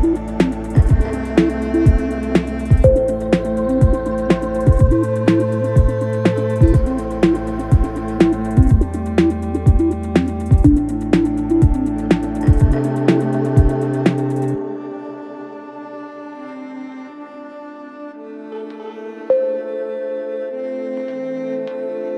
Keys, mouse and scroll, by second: 0.0 ctrl+a, 2.5 click, 8.7 click, 10.3 alt+scroll up 1, 14.0 alt+click, 15.9-16.3 alt+scroll down 1, 17.3 scroll up 2, 17.9 alt+scroll down 1, 19.5 click.